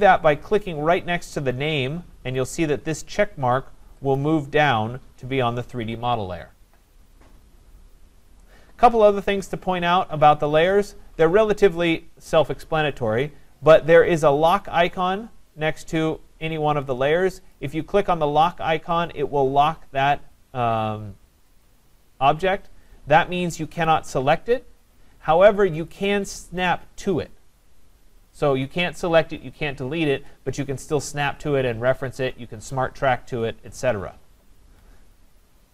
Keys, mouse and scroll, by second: 4.2 click, 17.5 click, 21.6 click, 23.9 click, 25.9 click, 34.7 Escape.